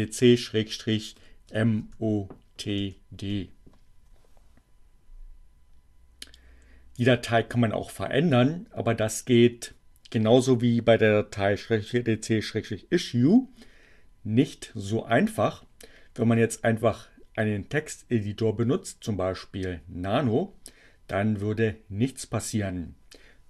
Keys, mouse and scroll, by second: 0.0-1.0 typing, 2.7 d, 2.9 Return.